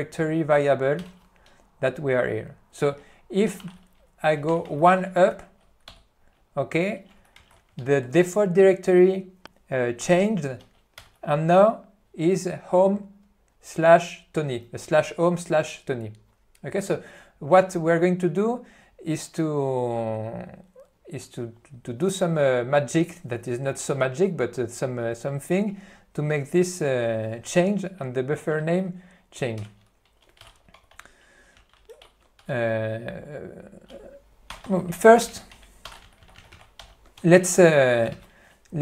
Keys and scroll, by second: 1.1 Return, 3.6 c, 3.8 space, 7.5 alt+:, 11.1 Return, 29.7 Left, 30.8 p, 31.6 e, 32.2 b, 32.4 q, 34.8-37.2 typing, 36.9 Return, 38.3 ctrl+y.